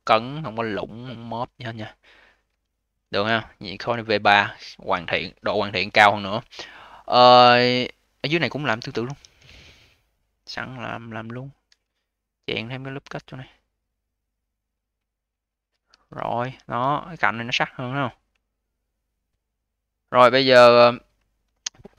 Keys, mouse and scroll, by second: 0.8-1.8 scroll down 8, 1.8-3.1 alt+middle drag, 3.1-4.9 scroll down 2, 4.9 ctrl+s, 6.1 scroll up 2, 6.4 alt+click, 7.2 alt+middle click, 8.6 q, 8.9 v, 9.4 alt+middle click, 9.9-10.8 alt+drag, 10.8-11.5 scroll up 4, 11.5 a, 15.8 q, 16.3 v, 16.6-17.0 scroll up 1, 17.0-17.9 scroll down 1, 17.9-18.3 scroll down 3, 18.3 alt+middle click, 18.8-20.6 alt+drag, 20.6-21.4 alt+middle drag, 21.4 ctrl+s.